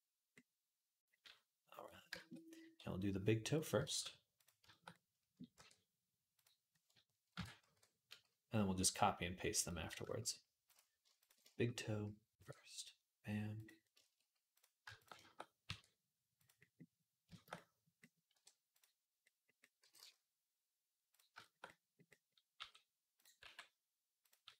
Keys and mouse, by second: 2.5 g, 3.7 ctrl+z, 4.2-6.2 shift+drag, 5.4 e, 6.2-14.8 middle drag, 7.1 ctrl+l, 7.5 q, 12.1 e, 14.7 shift+a, 14.8 click, 14.9-18.3 shift+middle drag, 15.5 e, 18.1 r, 18.3-22.3 drag, 19.6 g, 22.3-24.5 middle drag, 22.3 g, 23.2 r, 24.2 g.